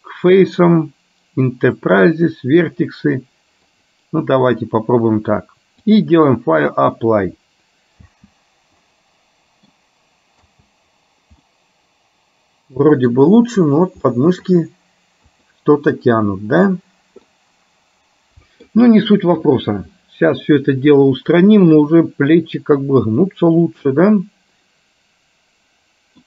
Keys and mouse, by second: 6.0 click, 8.2 space, 9.0 middle click, 10.7 space, 11.7-13.2 middle drag, 14.2 middle click, 17.4-18.7 middle drag, 19.5 KP_1, 21.8-26.2 middle drag.